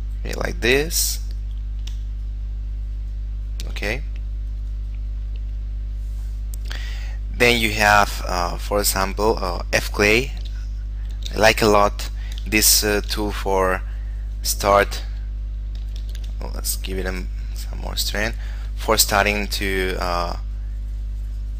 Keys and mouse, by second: 0.7 shift+middle click, 2.4 click, 9.8 click, 10.6 d, 11.4 f, 12.4 click, 12.8 shift+middle click, 13.7 click, 15.0 f, 15.6 click, 16.2 shift+f, 17.2 click.